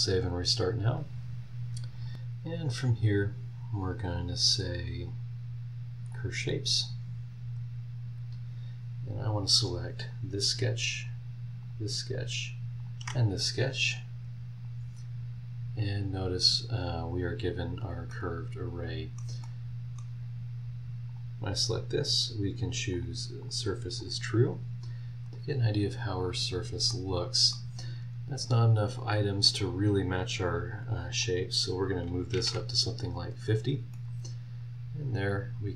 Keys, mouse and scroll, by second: 2.8 click, 6.0 click, 9.0 scroll up 2, 10.0 click, 11.6 ctrl+click, 12.8 ctrl+click, 14.6 click, 15.5 scroll down 1, 16.0 scroll up 1, 17.7 scroll down 1, 18.1 middle click, 18.2-19.3 drag, 18.2-19.3 right drag, 19.4 middle click, 19.5 click, 19.5 right click, 21.1 click, 22.9 click, 23.4 click, 24.0 click, 25.2 click, 25.6 scroll up 1, 25.9 scroll down 1, 26.5 scroll up 1, 26.9 middle click, 29.6 click, 31.2 click, 32.3 KP_5, 32.4 KP_0, 33.9 middle click, 34.4 scroll up 1.